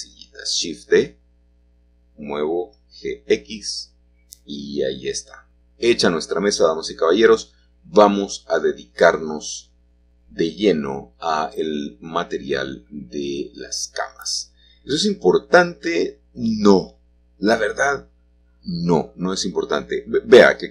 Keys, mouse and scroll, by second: 1.5 Escape, 4.6-7.9 drag, 7.9-9.5 middle drag, 7.9-8.5 scroll down 1, 12.6 shift+middle click, 12.6-13.1 scroll down 1, 13.1 shift+middle click, 16.8 alt+h, 18.7 click, 20.0 h.